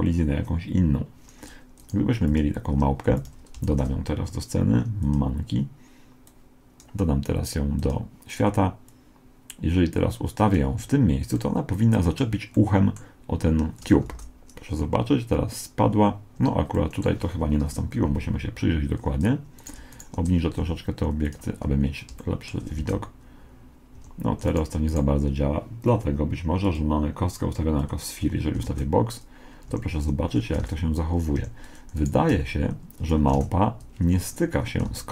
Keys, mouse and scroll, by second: 1.8 right click, 2.3-4.1 drag, 3.1 x, 3.7 shift+a, 6.3-10.6 drag, 11.4-14.3 middle drag, 14.1 alt+a, 16.4 Escape, 17.7 KP_1, 19.6-21.9 right drag, 20.6 g, 21.6-24.0 middle drag, 22.8 alt+a, 24.0 Escape, 24.5-26.9 right drag, 26.7-28.4 drag, 28.6 alt+a, 29.7 Escape, 30.6 alt+a, 31.4 Escape, 32.0 right click, 32.4 g, 33.4 alt+a, 34.2 Escape, 35.0 alt+a.